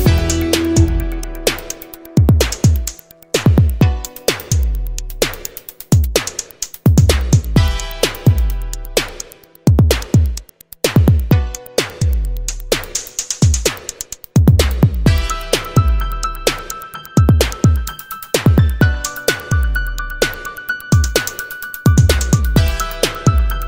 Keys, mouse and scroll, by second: 0.2 click, 2.0 click, 3.2 click, 4.1 click, 6.2 right click, 6.9 Escape, 9.4 click, 10.0 click, 11.1 click, 12.3 7, 12.8 2, 13.7 click, 15.4-17.9 drag, 18.8 0, 20.2 1, 20.8 2, 21.4 1, 23.2-23.6 drag.